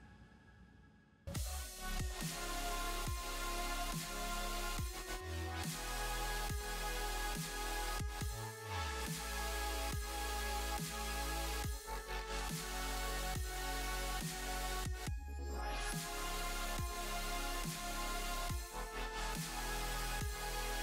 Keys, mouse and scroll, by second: 0.5 click, 0.7 middle click, 1.2 middle click, 1.5 ctrl+r, 1.9 click, 2.2 middle click, 2.7 click, 2.8 Tab, 2.9 middle click, 3.2 click, 3.5 space, 10.8 space, 11.0-11.3 scroll down 2, 11.3 middle click, 11.6 scroll down 2, 11.9 middle click, 13.5 click, 14.0 click, 14.2-14.7 scroll up 3, 14.4 middle click, 15.1-15.5 scroll up 2, 15.9 click, 17.5 click, 17.8 click, 18.0 click, 19.6 click, 20.3 click.